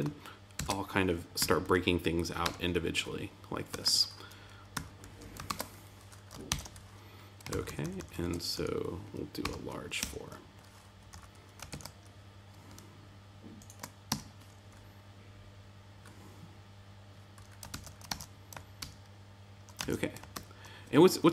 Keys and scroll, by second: 0.5 super+x, 1.3 Tab, 2.4 Return, 3.7 super+v, 4.7 Tab, 5.4 super+z, 6.4 shift+super+d, 7.4 alt+Left, 8.5 Right, 10.9 Right, 11.1 Up, 11.6 super+Right, 14.0 Tab, 17.7 super+s, 18.0 super+Tab, 18.7 super+r, 19.7 super+Tab, 20.3 super+z.